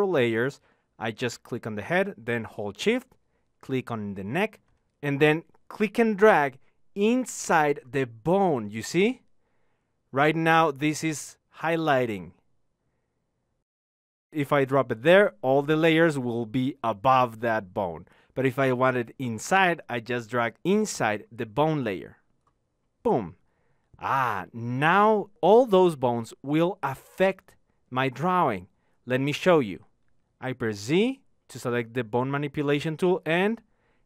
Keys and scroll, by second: 30.9 z.